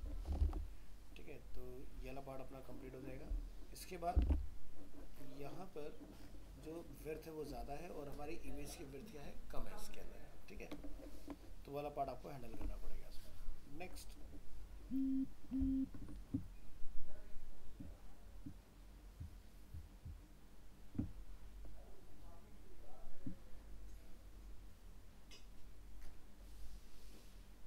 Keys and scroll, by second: 0.4 ctrl+s, 4.2 alt+Tab.